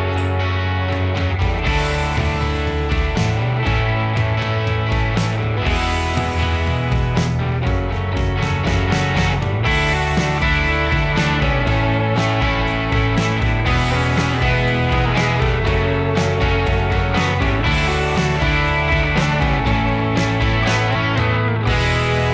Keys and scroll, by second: 14.8 ctrl+s, 18.4 ctrl+h.